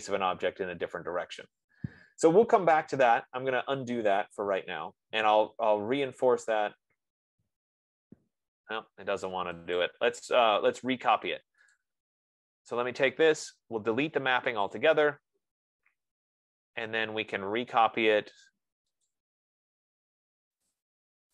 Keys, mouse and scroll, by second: 3.5 ctrl+z, 4.8 ctrl+z, 6.7 ctrl+z, 8.6 ctrl+z, 10.2 click, 10.9-11.5 scroll, 11.6 Escape, 12.1 click, 15.1 click, 19.5 click, 21.1 click.